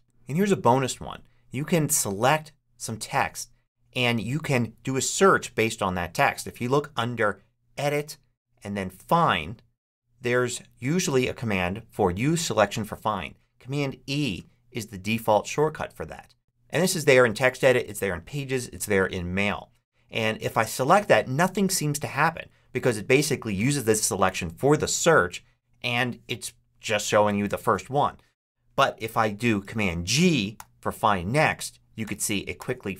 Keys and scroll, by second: 30.4 super+g, 31.9 super+g.